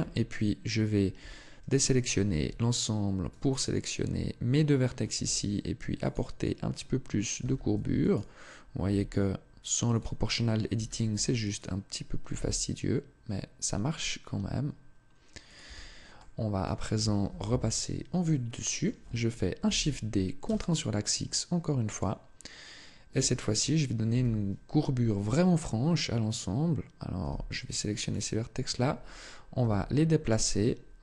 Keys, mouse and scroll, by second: 0.6 Tab, 1.0 a, 2.1 b, 4.9 g, 5.9 click, 7.2 a, 7.6 b, 8.6 g, 9.8 click, 10.5 a, 10.9 b, 12.1 g, 15.4 click, 15.4 Tab, 16.0 middle click, 17.0 KP_7, 18.1 shift+middle click, 19.4 shift+d, 21.8 click, 22.9 Tab, 23.9 KP_3, 27.0 b, 29.4 g, 30.2 click, 30.9 r.